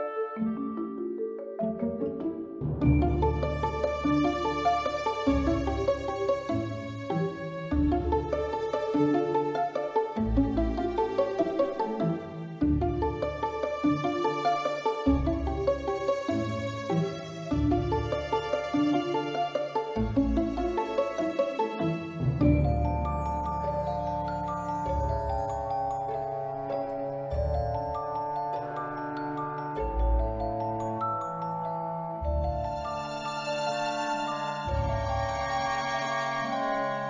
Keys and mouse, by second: 0.3-1.4 middle drag, 2.0-2.5 drag, 2.7-3.4 middle drag, 3.8 click, 4.4 click, 5.6 Tab, 5.9 1, 6.2 click, 7.8 click, 9.1 b, 10.1-11.4 drag, 12.0 b, 12.6-13.6 drag, 14.0 Tab, 14.7 middle click, 15.8-16.3 middle drag, 16.9 click, 17.2 middle click, 18.6 shift+middle click, 20.9 shift+d, 22.2-22.5 middle drag, 23.1-23.6 drag, 23.9 s, 24.6 click, 25.9 x, 26.8 click, 28.6 click, 31.6 middle click, 32.9-34.2 drag, 34.6 middle click, 35.3-36.4 drag, 36.7-37.0 middle drag.